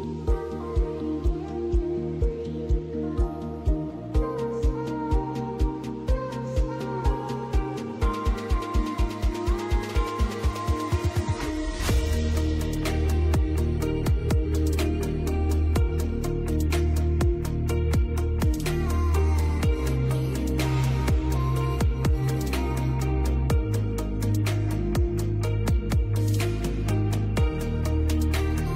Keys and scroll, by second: 3.5 l, 3.9 Escape, 6.8 F4, 9.7 F3, 11.0 ctrl+z, 15.8 F2, 17.4 space, 17.7 F3, 18.8 Escape, 27.2 Escape.